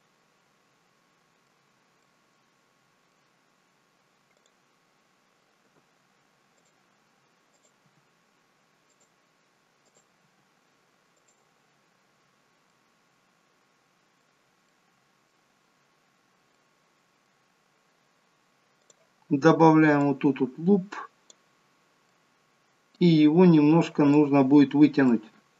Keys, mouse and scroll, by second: 0.0 middle click, 1.7-2.1 scroll down 2, 2.1 middle click, 3.5-4.3 scroll up 2, 4.3 click, 5.7 g, 7.5 click, 7.8 g, 9.9 click, 10.2 g, 11.9-12.7 scroll down 3, 12.7 middle click, 14.7 middle click, 18.8 middle click, 18.8 click, 20.1 click, 22.1 middle click, 24.1 click, 24.7-25.2 scroll up 2, 25.0 shift+middle click.